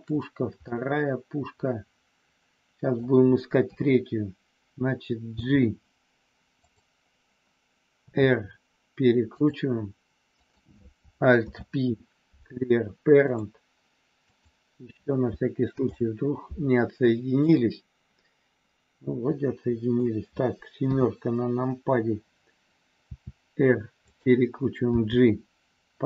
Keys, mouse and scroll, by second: 0.8-3.0 middle drag, 3.6 KP_3, 5.4 g, 8.0 r, 9.2 click, 11.4 alt+p, 14.2 click, 15.8 alt+p, 18.2-19.9 middle drag, 20.8 KP_7, 23.1 r, 24.1 click, 25.0 g.